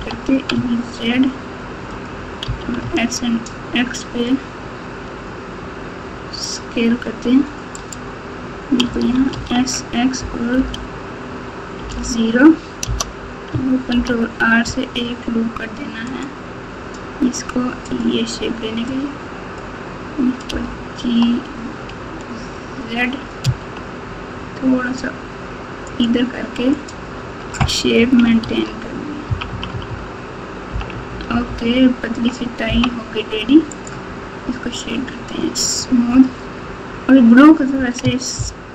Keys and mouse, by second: 0.5 e, 2.5 s, 8.8 s, 13.9 ctrl+r, 18.9 click, 20.5 g, 26.7 click, 27.1 Tab, 28.4 alt+z, 29.2-32.6 typing, 33.7-35.8 right drag, 38.3 ctrl+KP_8.